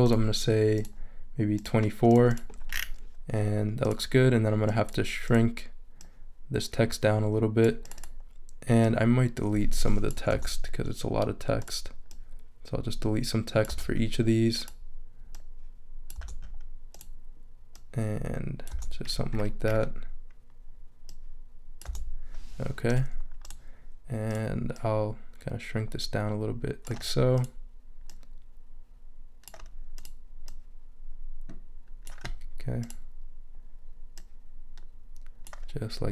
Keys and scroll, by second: 10.3 BackSpace, 13.7 BackSpace, 16.2 BackSpace, 18.7 BackSpace, 21.8 BackSpace.